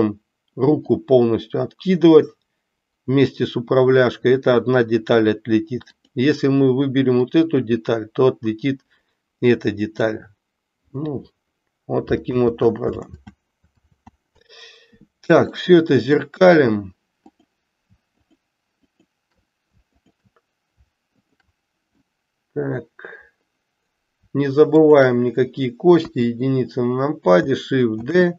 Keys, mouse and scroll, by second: 0.8-5.3 drag, 7.2-10.1 drag, 12.3 ctrl+z, 15.5 middle click, 17.2 click, 18.7 shift+click, 19.9 shift+click, 21.9 middle click, 28.1 shift+d.